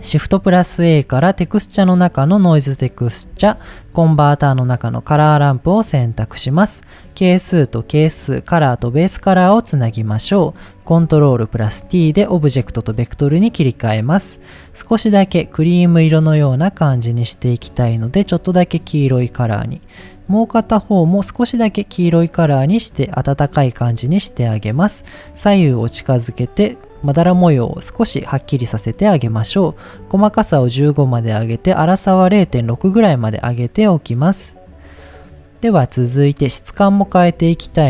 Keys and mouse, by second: 0.3 shift+a, 3.5 shift+a, 6.0 click, 6.9-7.7 drag, 8.4-9.3 drag, 9.7 click, 11.7 ctrl+t, 12.6-13.5 drag, 14.5 click, 15.1 drag, 19.2 click, 19.9 click, 23.6 click, 24.9-25.2 drag, 25.8 click, 27.1 shift+middle click, 29.0 middle click, 29.8 click, 30.8-33.7 drag, 36.7 middle click, 37.5 shift+a.